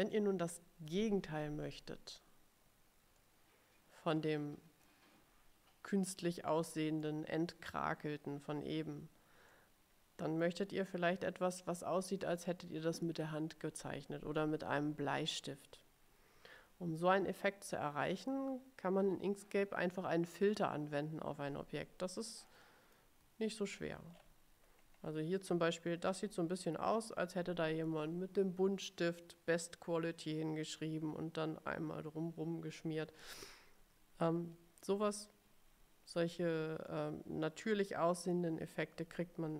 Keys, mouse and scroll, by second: 0.2-0.8 ctrl+scroll up 4, 3.3-5.1 middle drag, 6.6 middle click, 9.6 click, 10.0 middle click, 10.1 click, 10.2 middle click, 22.7 middle click, 23.7-25.2 ctrl+scroll up 6, 26.1 scroll down 2, 34.4 middle click, 37.0 click, 39.1-39.5 ctrl+scroll down 7.